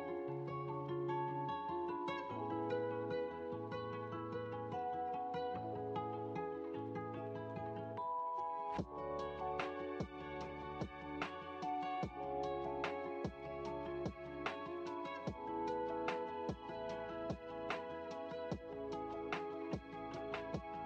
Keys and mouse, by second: 2.6-9.4 drag, 10.1-13.8 middle drag, 16.9 click.